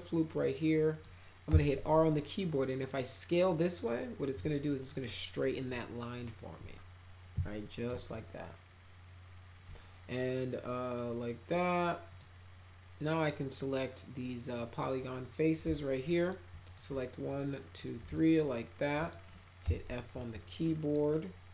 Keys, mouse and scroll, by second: 0.1 middle click, 0.7 middle drag, 1.4 r, 2.9-7.8 drag, 10.0 middle click, 10.6 middle click, 12.0 click, 14.5 middle click, 15.8 alt+middle click, 16.6 click, 17.2 ctrl+click, 17.7 ctrl+click, 18.1 alt+middle click, 18.9 middle click, 19.6 f, 20.6 middle click.